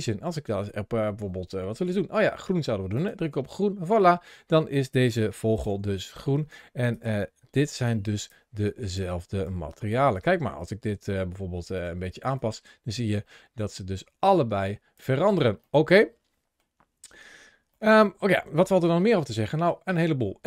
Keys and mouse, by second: 0.1-2.9 drag, 5.5 g, 7.4 ctrl+shift+a, 11.5 click, 15.5-16.4 middle drag, 17.1 ctrl+shift+7, 17.4 ctrl+shift+2, 17.6-18.0 middle drag, 18.6 shift+middle click.